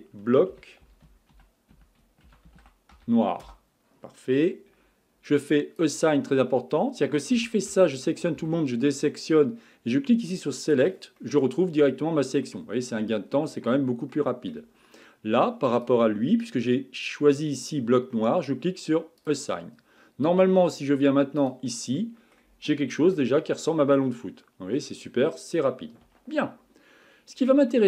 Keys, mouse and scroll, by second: 5.5-7.4 drag, 7.4 a, 7.7 a, 8.4 a, 10.6-11.2 drag, 11.2-13.3 middle drag, 13.3-13.7 scroll down 2, 13.7-14.1 scroll up 3, 14.1-15.8 middle drag, 15.8 click, 19.2-21.5 drag, 22.0 middle click, 22.6-23.0 scroll down 3, 23.0 Tab, 23.4-25.1 middle drag, 25.1-26.0 scroll up 4, 26.0 Tab, 27.7 middle click.